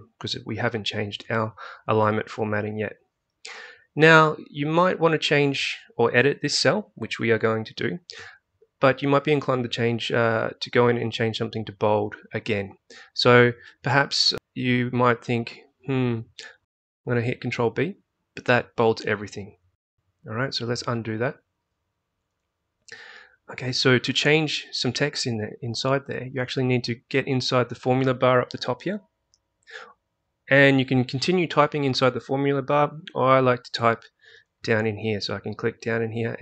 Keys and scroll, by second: 17.8 ctrl+b.